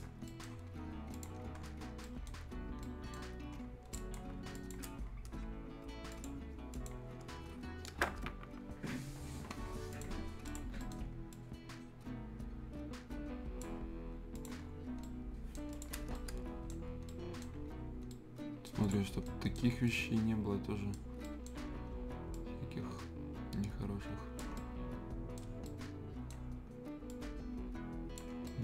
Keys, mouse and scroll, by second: 0.0 scroll down 1, 0.2 right click, 1.1 click, 1.4 scroll down 1, 1.5 scroll up 1, 2.0 right click, 2.4-2.7 scroll up 1, 2.8 right click, 3.2 scroll down 1, 3.9 click, 7.3 scroll up 1, 8.1 Return, 9.5 scroll up 1, 9.9 click, 10.2 scroll up 1, 10.4 click, 10.8 right click, 11.3-14.3 drag, 14.6 scroll down 1, 14.8 scroll up 1, 15.0 right click, 15.7 click, 15.9 scroll up 1, 16.1 right click, 16.8 scroll up 1, 17.1 right click, 17.5-18.1 scroll up 1, 18.1 right click, 18.8 click, 19.0 scroll up 1, 19.2 right click, 19.6 scroll down 1, 19.8 right click, 21.0 scroll down 1, 21.2 right click, 21.6 scroll up 1, 22.3-24.5 drag, 24.5 right click, 25.5 scroll down 1, 25.6 right click, 26.4 scroll up 1, 27.1-28.4 drag, 28.3 scroll down 1, 28.4 right click.